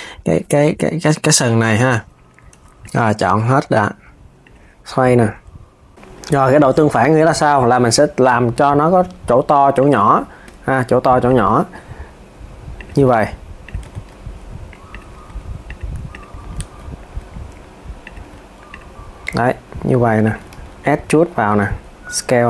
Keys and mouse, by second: 0.5 r, 2.2 z, 2.5 click, 3.3 r, 4.7 click, 5.0 r, 5.9 KP_1, 6.1 KP_3, 8.2 alt+s, 9.5 alt+s, 10.9 click, 11.2 alt+s, 12.5 alt+s, 12.9 r, 15.8 click, 16.9 s, 18.3 click, 19.0 alt+s, 19.9 alt+s, 20.2 e, 21.3 alt+s, 22.3 alt+s.